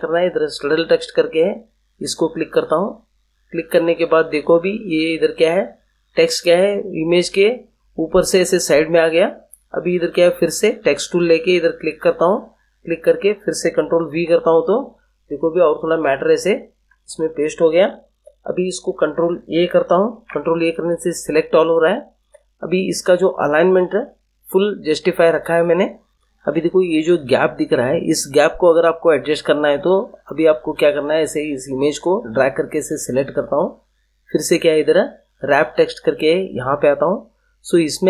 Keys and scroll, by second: 14.0 ctrl+v, 15.9 ctrl+v, 20.1 ctrl+a.